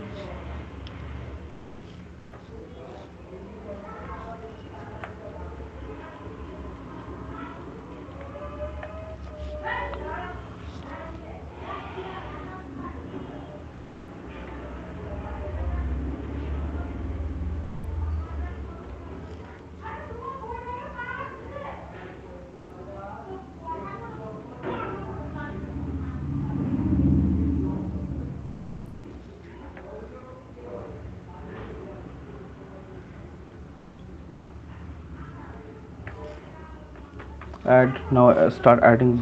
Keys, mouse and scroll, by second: 0.9 click, 1.1 click, 1.7 click, 2.9 alt+click, 3.2 click, 4.8 click, 4.8 right click, 6.3 click, 7.0 click, 7.0 alt+click, 7.8 click, 8.2 alt+click, 8.6 alt+click, 9.0 right click, 9.3 alt+click, 10.2 ], 11.3 click, 12.5 click, 13.5 click, 14.3 click, 14.8 ctrl+z, 16.4 click, 18.4 click, 19.0 click, 20.0 alt+click, 21.4 alt+click, 22.4 click, 23.2 click, 24.9 click, 25.1 click, 25.3 click, 25.9 click, 26.8 click, 27.2 click, 27.6 click, 28.2 click, 28.6 click, 29.5 click, 29.8 alt+click, 30.1 click, 32.1 click, 32.9 click, 33.7 alt+click, 35.2 click, 36.0 alt+click, 37.0-39.2 typing.